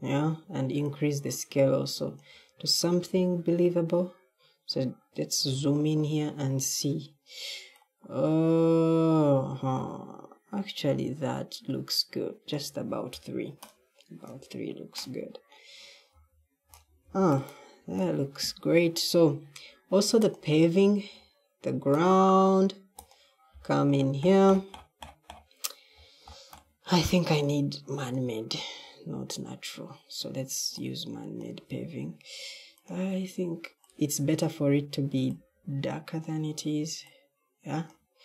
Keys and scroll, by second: 3.0 d, 5.3 w, 16.0 w, 16.6 w, 16.9 w.